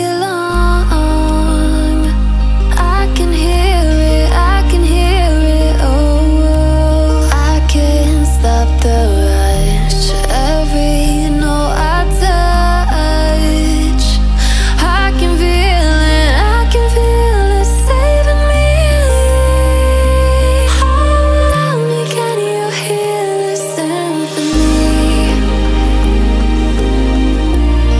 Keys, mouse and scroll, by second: 1.3 alt+scroll down 1, 1.5 alt+scroll up 1, 1.9-4.0 alt+shift+drag, 4.5-5.0 alt+scroll down 1, 5.0 alt+scroll up 1, 5.6 click, 7.7-8.4 alt+scroll down 1, 8.4 alt+scroll up 1, 8.9-11.3 drag, 11.7 alt+scroll down 1, 11.9-12.3 alt+scroll up 1, 12.8 click, 13.4 click, 14.6 typing, 15.6 typing, 16.6 Return, 17.8-19.0 typing, 20.6 click, 21.6 r, 22.3 click, 22.6 ctrl+a, 23.8 click, 27.0 click.